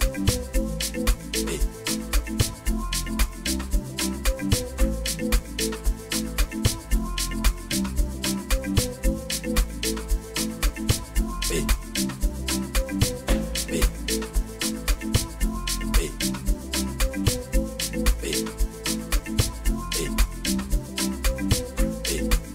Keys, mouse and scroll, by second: 8.7 Escape.